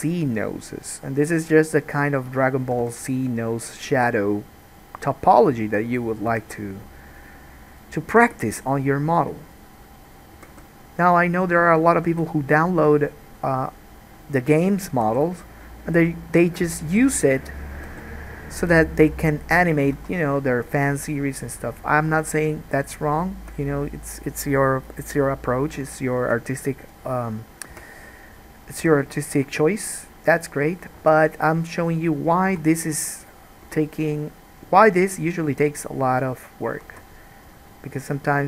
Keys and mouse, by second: 2.9 g, 6.5 g, 7.9 click, 8.3-10.2 middle drag, 8.3 g, 10.2 click, 10.3-11.7 middle drag, 10.5 g, 11.7 click, 12.1-14.7 middle drag, 12.1 g, 14.7 click, 15.1-17.6 middle drag, 15.1 g, 17.6 click, 17.7-21.1 middle drag, 18.0 g, 20.1 alt+a, 21.1-28.1 drag, 22.3 ctrl+z, 27.9 2, 28.1-33.0 middle drag, 29.0 g, 31.1 alt+a, 32.7 1, 33.0 click, 33.9-38.4 middle drag, 33.9 g, 37.1 alt+a.